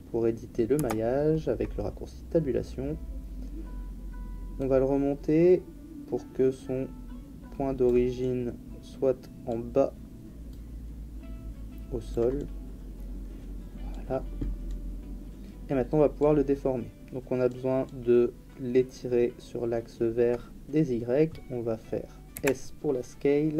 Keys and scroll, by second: 0.7 Tab, 22.3 s.